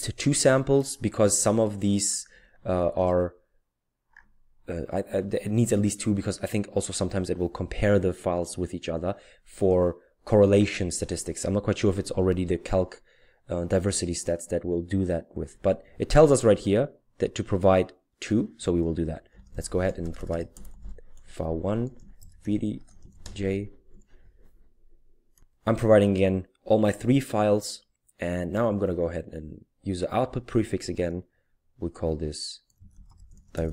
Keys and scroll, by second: 19.0-23.9 typing, 32.6-33.7 typing.